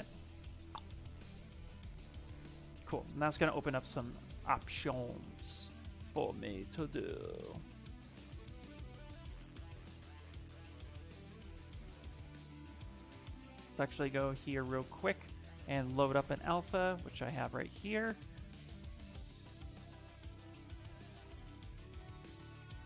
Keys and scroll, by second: 3.6 d, 4.1 d, 12.1 ctrl+z, 13.8-15.1 typing.